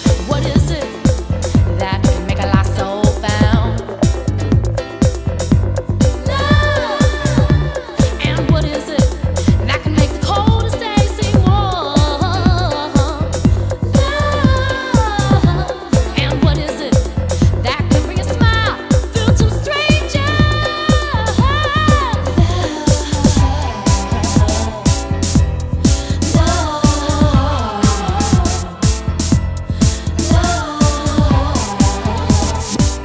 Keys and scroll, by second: 4.2 super+Tab, 7.9 super+space, 17.8 super+space, 18.8 super+space, 21.5 super+v.